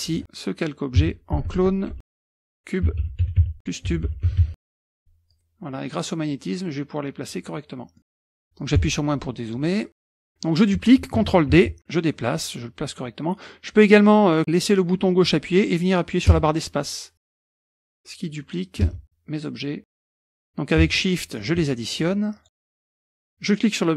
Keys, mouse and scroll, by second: 1.0-5.0 typing, 5.3-7.7 drag, 8.0 middle click, 8.8 KP_Subtract, 10.0 middle click, 11.6 ctrl+d, 11.8-13.4 drag, 14.4-17.4 drag, 16.4 space, 17.4 middle click, 17.7 click, 17.8 space, 18.5-20.2 drag, 18.9 space, 20.9 shift+click, 22.1 shift+click, 22.6 middle click, 22.6-23.0 scroll down 4, 22.8 shift+click, 22.9 middle click, 23.0 scroll up 2, 23.6-23.9 drag.